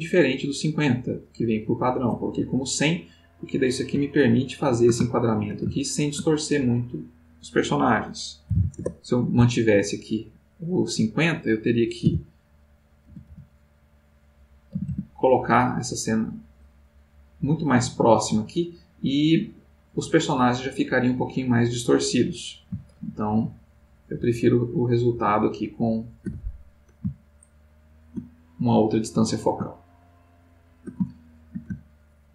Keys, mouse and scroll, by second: 3.4 click, 4.4-6.7 ctrl+middle drag, 7.2 click, 8.2-9.0 typing, 12.0 g, 13.0 x, 14.7 z, 19.6 click, 22.9 ctrl+z, 24.1 ctrl+z, 25.1 ctrl+z, 27.4-28.5 ctrl+middle drag, 28.9-32.3 middle drag.